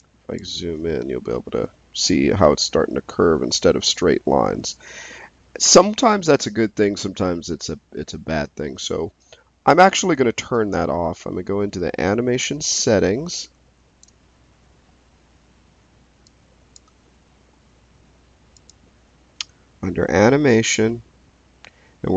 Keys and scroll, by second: 1.1 f.